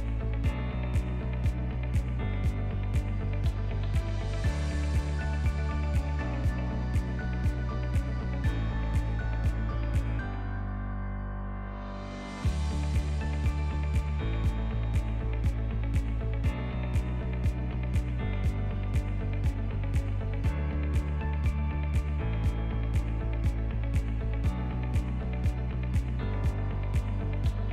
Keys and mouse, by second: 0.7 Tab, 1.2-3.8 drag, 4.0 s, 7.3-9.0 shift+drag, 9.0 shift+middle click, 9.5 Tab, 10.6 ctrl+middle click, 11.6 shift+middle click, 12.4 click, 13.6 g, 16.4 shift+middle click, 16.6 shift+click, 17.0 ctrl+click, 17.2 ctrl+middle click, 17.7 shift+middle click, 17.9 shift+click, 18.0 shift+middle click, 18.6 r, 19.8 e, 22.8 shift+click, 24.7 ctrl+b, 27.4 Tab.